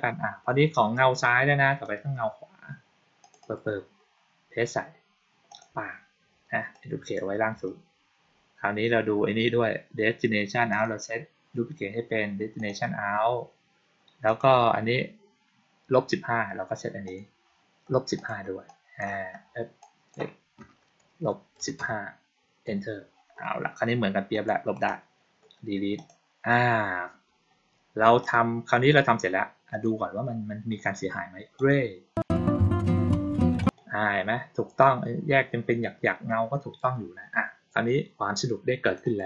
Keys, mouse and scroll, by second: 1.7 click, 3.1 click, 3.3 click, 5.4 click, 6.6 click, 10.6 click, 12.4 click, 14.1 click, 16.9 click, 18.0 click, 18.5-18.9 drag, 19.7 click, 24.2 click, 24.6 right click, 25.8 click, 28.1 click, 29.6 click, 31.4 click, 33.4 click, 38.7 click, 38.9 click.